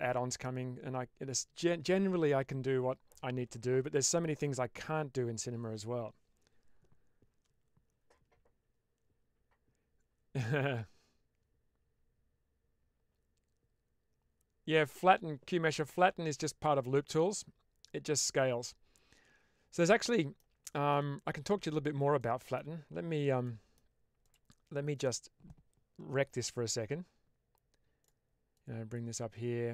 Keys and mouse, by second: 19.8 middle click, 20.6 shift+middle click, 22.1 middle click, 23.4 middle click, 24.1 click, 26.3 1, 28.5 click.